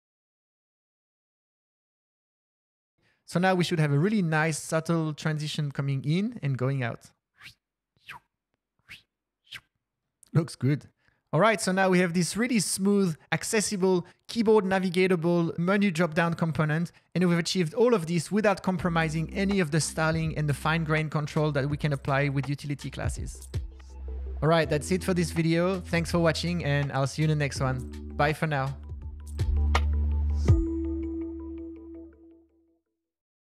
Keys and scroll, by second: 11.9 Return, 13.1 Down, 13.3 Down, 13.5 Page_Down, 13.6 Page_Down.